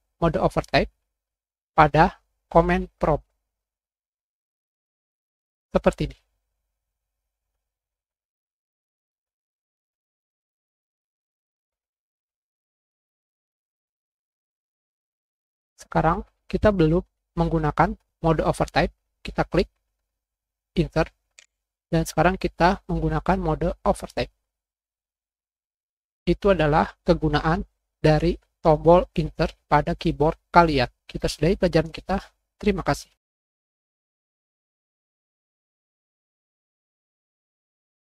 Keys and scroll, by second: 0.5 Return, 0.6 Up, 19.3 End, 19.4 Insert, 21.2 Insert.